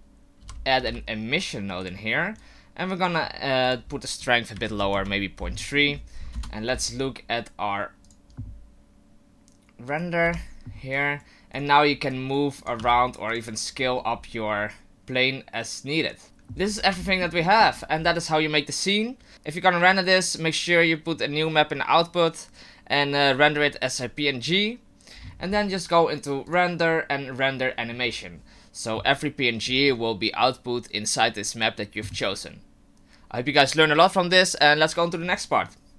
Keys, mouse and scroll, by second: 2.4 click, 3.6 click, 5.7-6.3 scroll down 2, 5.8 middle click, 6.3 KP_0, 8.0 click, 9.9 right click, 10.9 right click, 12.1 right click, 12.8 s, 13.8-14.7 scroll up 7, 16.2 click, 16.6-17.3 scroll down 9, 17.1 shift+middle click, 17.4 middle click, 17.8-18.9 scroll down 2, 18.9-19.3 scroll down 1, 19.3 click, 19.8 click, 26.4 click.